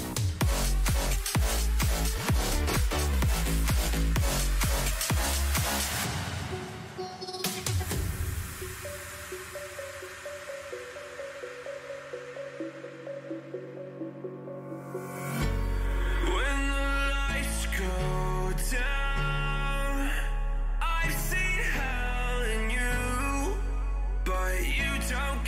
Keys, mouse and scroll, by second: 0.7-2.7 drag, 2.7-4.4 middle drag, 4.4-7.9 drag, 7.9 middle click, 13.3 a, 16.4 b, 18.4 g, 21.7 click, 22.0 a, 22.9 b, 24.3 g.